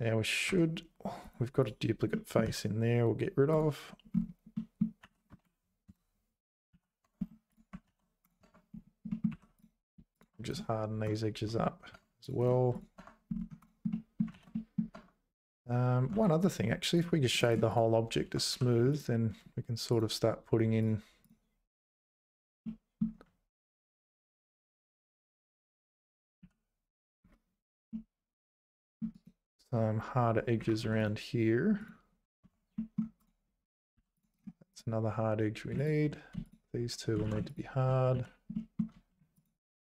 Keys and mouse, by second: 0.5 `, 1.2 click, 2.1 middle click, 2.4 x, 4.5 middle click, 5.0 a, 5.3 space, 6.7 z, 7.0 Tab, 7.9 ctrl+s, 8.4 Tab, 9.1 middle click, 9.3 2, 10.2 shift+click, 10.4 right click, 11.5 Tab, 11.9 Tab, 12.4 right click, 13.0 Tab, 13.9 middle click, 14.3 ctrl+s, 14.5 middle click, 14.9 Tab, 16.1 Tab, 16.4 right click, 17.4 right click, 18.2 Tab, 18.5 2, 18.9 alt+click, 20.8 shift+click, 22.6 middle click, 25.5 1, 26.4 z, 27.9-29.0 middle drag, 29.2-31.9 right drag, 30.8 2, 32.4 Tab, 32.7 middle click, 33.6 Tab, 33.9 2, 34.1 click, 34.3 right click, 36.4 shift+click, 37.2 ctrl+z, 38.1 z, 38.5 middle click, 39.4 alt+shift+click.